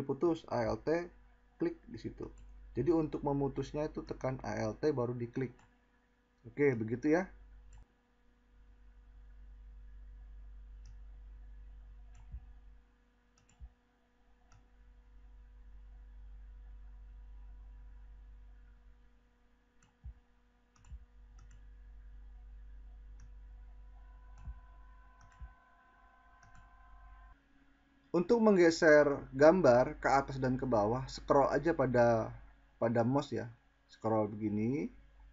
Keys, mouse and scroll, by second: 1.1 click, 31.1-35.3 middle drag, 31.1-33.7 scroll.